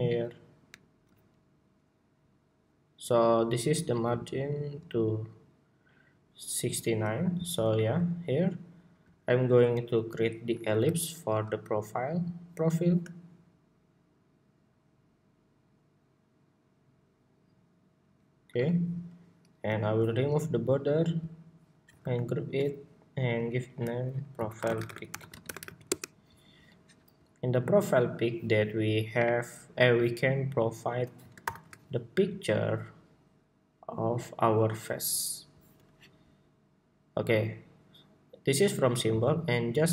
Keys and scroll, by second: 21.7 super+g, 31.1 shift+super+y.